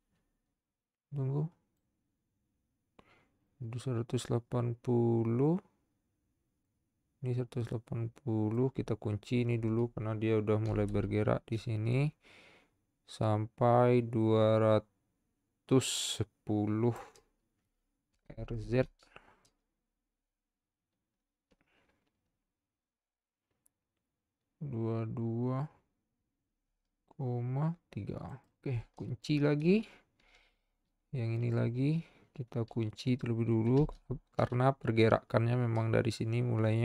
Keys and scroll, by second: 10.9 i, 18.3 r, 18.6 z, 30.2 |, 33.8 |.